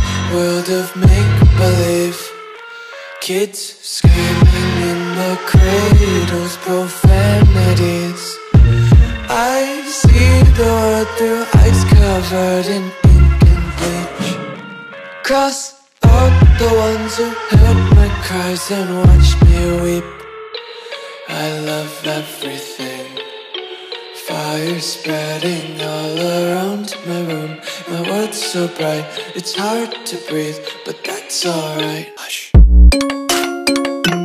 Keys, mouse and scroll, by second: 1.1 Delete, 1.9 click, 5.1 click, 15.1 Return, 19.0 click, 21.3 Delete, 23.0 click, 32.2 click.